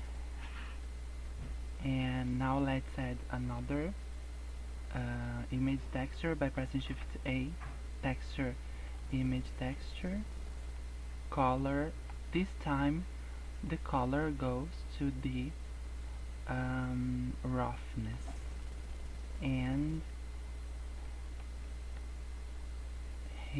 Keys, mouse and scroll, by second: 0.7 scroll up 1, 1.8 click, 2.7 middle click, 6.9 shift+a, 10.9 click, 12.0 middle click, 12.2 scroll up 5, 12.5 middle click, 13.7 click, 18.5 middle click, 19.0-20.0 scroll up 4, 21.1 middle click, 21.6 middle click, 22.8 scroll down 2, 23.1 middle click.